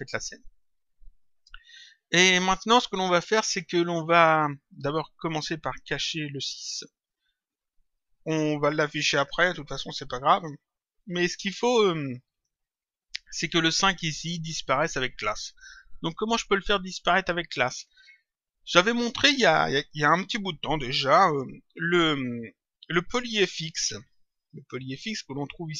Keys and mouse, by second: 6.3 click.